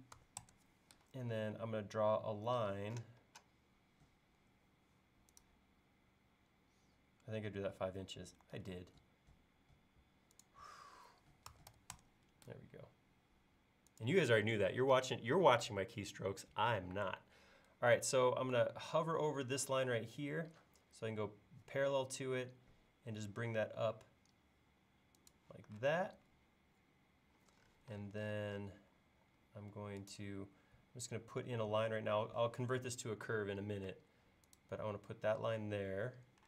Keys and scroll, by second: 0.2 5, 0.4 Return, 8.6 super+z, 11.3-12.2 typing, 26.0 space, 29.1 l.